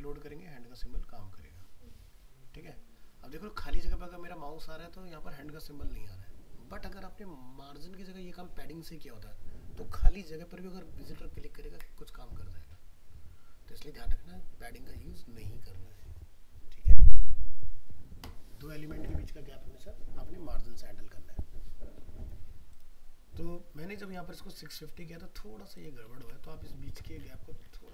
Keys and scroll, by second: 26.2 alt+Tab.